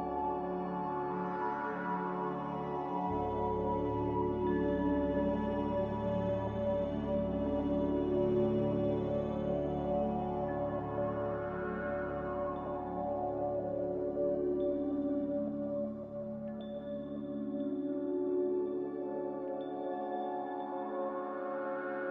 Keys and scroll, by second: 3.5-4.3 typing, 9.0-9.7 typing, 17.1 a, 19.3 z, 20.3 a.